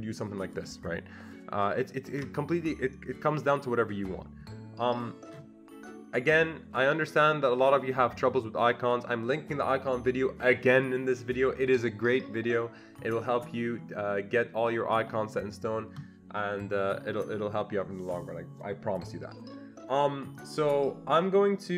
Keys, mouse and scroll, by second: 2.1 ctrl+z.